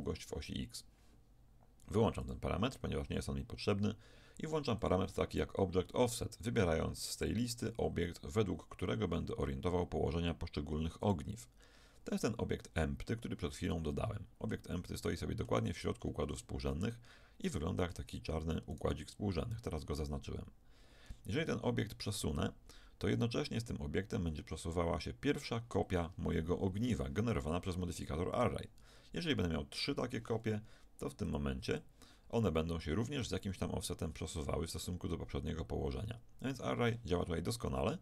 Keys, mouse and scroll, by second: 2.2-9.8 drag, 13.9-18.7 middle drag, 18.7-20.6 right drag, 22.4-24.8 drag, 28.4 right click, 28.9-31.2 middle drag, 31.2-34.8 drag.